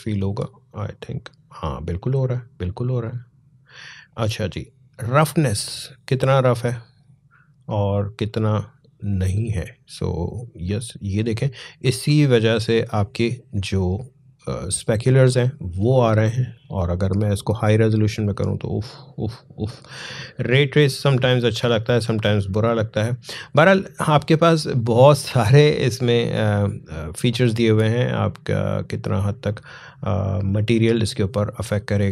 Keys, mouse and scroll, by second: 5.3-15.0 drag, 15.9 click, 18.3 click, 20.4 scroll down 1, 21.2 scroll up 1, 25.2-27.9 drag, 30.2-31.0 scroll up 1.